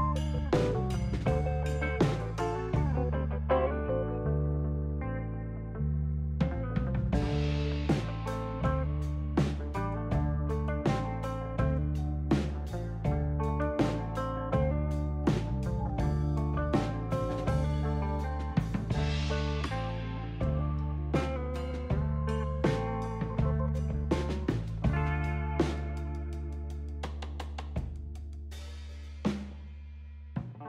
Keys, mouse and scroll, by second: 1.8 shift+s, 4.4 shift+s, 5.9 shift+s, 9.6 shift+s, 10.8 shift+s, 12.0 shift+s, 13.9 shift+s, 18.2 shift+s, 19.6 shift+s, 20.3 shift+s, 21.7 shift+s, 26.8 shift+s, 29.0 shift+s, 30.1 shift+s.